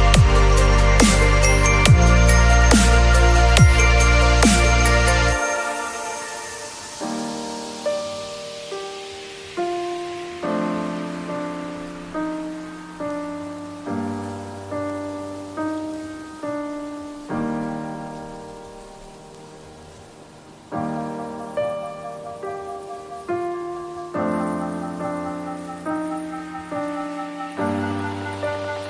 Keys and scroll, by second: 2.4 space, 7.5 b, 8.7 [, 12.4 [, 19.4 ctrl+z, 23.5 v, 25.5 ctrl+l.